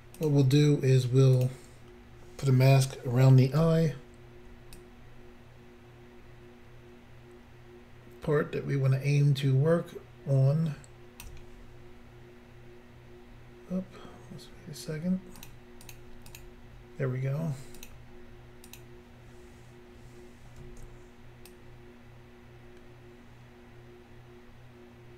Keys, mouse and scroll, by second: 0.2 click, 0.2 click, 1.3 click, 1.4 click, 4.7 ctrl+click, 15.4 click, 15.5 click, 15.9 click, 16.0 double click, 16.3 double click, 16.4 double click, 17.9 click, 18.7 click, 18.8 click.